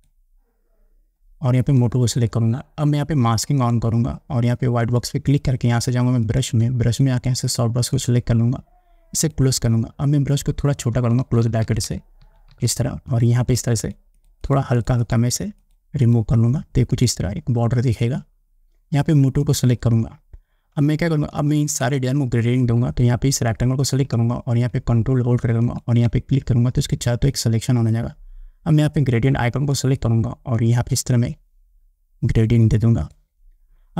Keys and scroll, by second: 11.2 [.